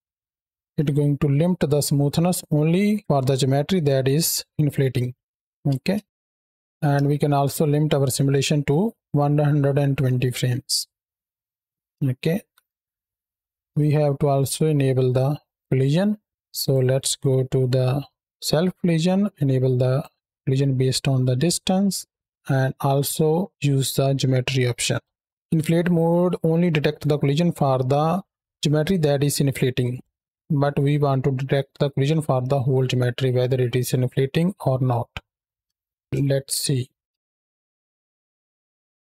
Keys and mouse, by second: 3.0 middle click, 4.1-5.3 middle drag, 5.6 space, 6.2 click, 6.7 shift+Right, 6.7 space, 6.8 shift+Left, 7.2 space, 9.9-11.9 middle drag, 11.9 space, 12.2 shift+Right, 12.8 middle click, 13.6 shift+middle click, 16.4 click, 19.8 click, 23.4-25.0 drag, 25.3-36.0 drag, 36.0 shift+Left, 36.7 space.